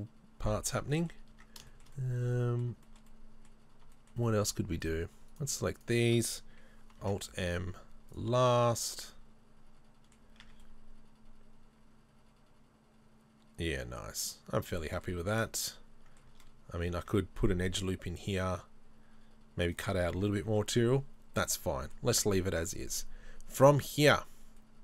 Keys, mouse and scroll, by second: 1.4 Tab, 1.8 shift+middle click, 2.0 middle click, 2.9 shift+middle click, 3.7 scroll up 1, 4.0 shift+middle click, 4.9 right click, 5.4 shift+right click, 7.1 alt+m, 8.9-16.2 middle drag, 10.2 scroll down 2, 10.5 Tab, 15.2 Tab, 16.8 ctrl+r, 19.8 right click, 20.1 scroll down 1, 20.5 Tab, 20.6 middle click.